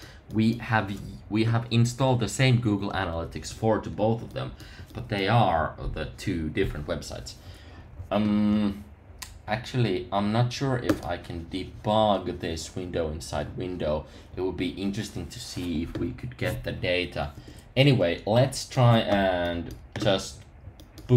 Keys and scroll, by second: 17.3 super+§.